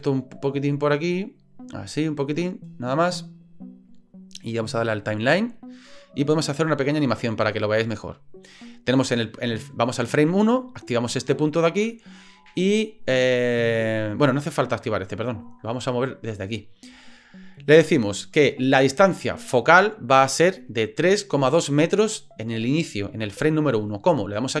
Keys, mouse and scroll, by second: 0.1-2.2 drag, 5.2 click, 6.4-8.1 drag, 11.3 click, 15.3 click.